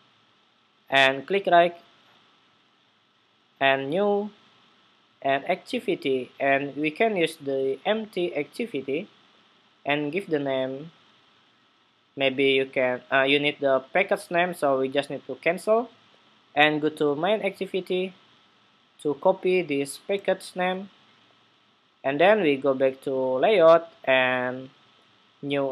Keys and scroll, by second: 19.9 super+c, 20.1 super+c.